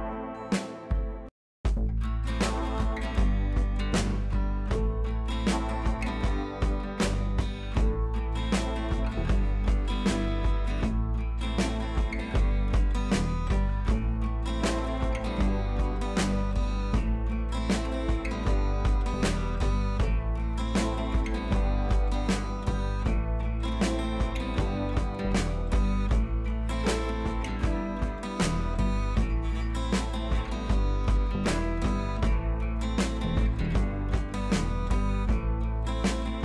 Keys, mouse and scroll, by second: 0.8 click, 3.9 click, 6.5 click, 8.2 typing, 8.6-9.5 alt+scroll down 1, 9.6 click, 14.3 click, 14.3 typing, 14.4-15.2 scroll down 1, 16.3 click, 21.0 click, 24.6-25.3 click, 28.2 click, 29.0-29.4 scroll down 1, 29.4 click.